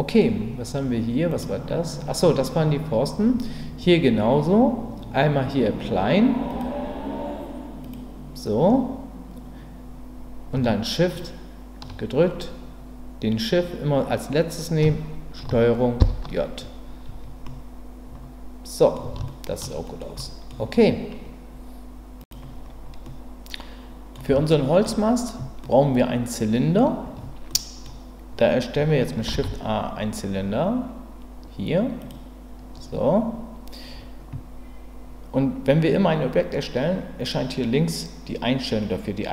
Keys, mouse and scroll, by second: 1.3 click, 6.5-7.9 drag, 11.1 shift+click, 16.0 ctrl+j, 17.4-18.9 middle drag, 19.3-19.6 shift+middle drag, 19.8 middle click, 20.2 middle click, 23.0-24.1 middle drag, 24.5-24.9 shift+middle drag, 25.9 middle click, 27.5 middle click, 29.3 shift+a.